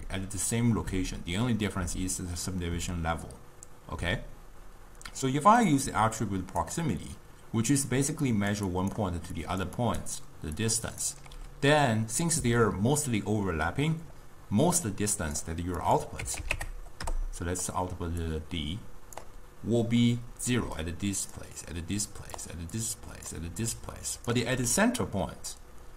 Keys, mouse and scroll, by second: 5.8 click, 8.0-11.4 typing, 8.4 click, 8.8 click, 9.5 click, 9.9 click, 10.7 click, 14.9-18.4 drag, 20.7-24.5 typing, 20.9 click, 21.9 click, 22.9 click, 23.8 click.